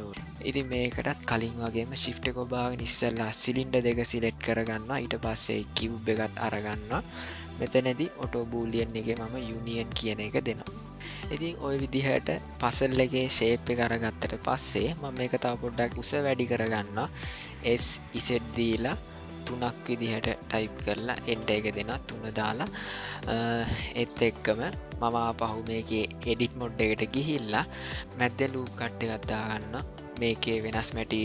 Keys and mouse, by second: 1.8 click, 3.5 shift+click, 5.7 shift+click, 9.6 click, 11.3-12.3 middle drag, 13.0-14.6 ctrl+middle drag, 15.1-15.7 shift+middle drag, 17.7 s, 23.7 shift+middle click, 24.5 middle click, 25.2-26.4 drag, 27.4 middle click.